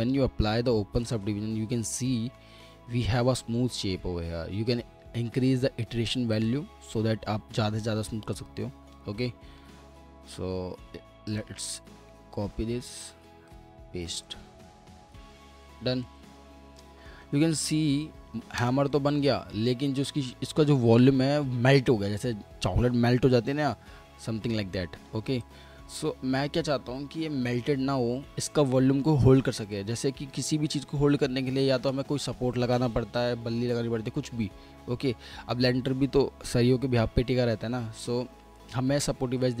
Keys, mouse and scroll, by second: 2.3 alt+middle click, 3.0 scroll up 1, 3.3 middle click, 9.6 middle click, 11.3 right click, 16.8 middle click, 17.9 F4, 18.9 middle click, 19.5-22.5 scroll down 1, 39.0-39.6 scroll up 1.